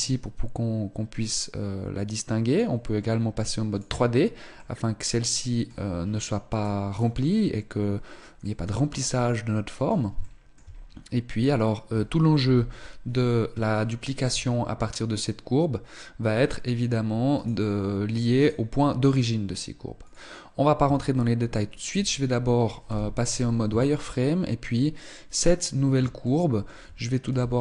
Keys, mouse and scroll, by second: 3.4 click, 4.3 middle click, 6.2 right click, 6.6 right click, 8.1 middle click, 9.9 shift+middle click, 10.4-10.7 scroll up 3, 12.1 KP_1, 12.7 scroll down 3, 13.5 shift+middle click, 14.2-14.5 scroll down 1, 17.1 right click, 18.1 right click, 19.7 click, 20.5 Tab, 21.0 scroll up 2, 21.5 Tab, 22.5 z, 23.4 Tab, 25.0 scroll up 1, 25.9 shift+middle click, 26.8 s.